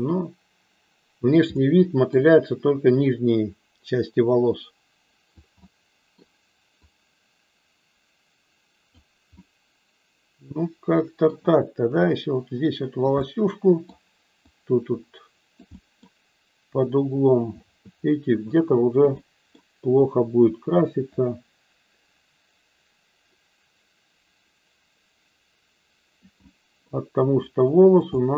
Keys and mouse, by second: 1.4 middle click, 3.1-5.3 drag, 5.7 middle click, 6.7-8.9 drag, 9.4-11.3 middle drag, 12.1-13.1 drag, 13.2 middle click, 14.4-15.5 drag, 15.7 middle click, 16.8 click, 18.4 click, 19.2 middle click, 20.1 click, 21.2-26.2 drag, 26.3 middle click, 27.3 click, 28.1 middle click.